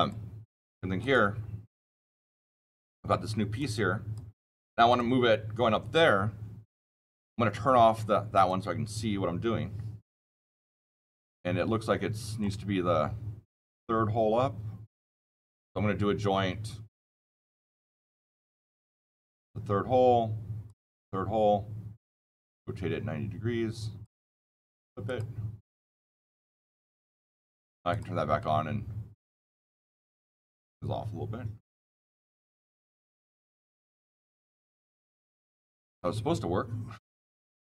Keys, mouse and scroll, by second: 0.9 click, 1.7 scroll down 7, 3.5 click, 4.8 click, 8.3 right click, 10.7-11.9 shift+middle drag, 17.1 shift+middle click, 17.6 shift+middle click, 19.3 shift+middle click, 20.6 shift+middle click, 22.1 shift+middle click, 27.8-33.8 shift+middle click, 35.1-37.7 shift+middle click, 35.1 shift+middle click, 36.4-37.5 shift+middle drag.